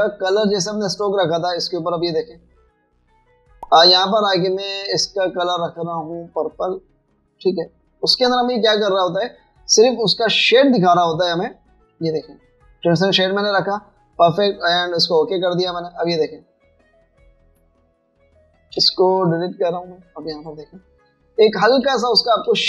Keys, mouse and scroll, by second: 2.8 double click, 12.5 double click, 17.6 alt+scroll down 1, 18.1 alt+scroll up 1, 20.3 Delete, 21.5 alt+scroll down 1, 21.7 alt+scroll up 1.